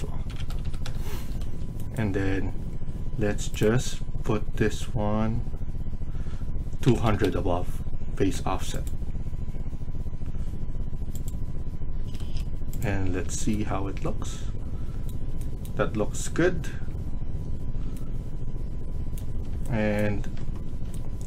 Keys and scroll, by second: 0.0-0.6 typing, 0.7 Return, 1.1 Escape, 1.4 Escape, 6.5-7.4 typing, 11.9 Escape, 12.1 Escape.